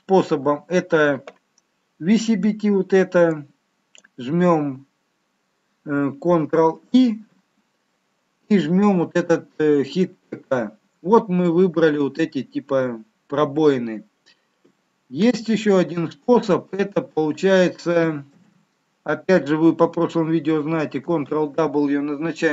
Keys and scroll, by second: 6.9 ctrl+i, 15.6 ctrl+z, 18.2 ctrl+z, 21.0 ctrl+w.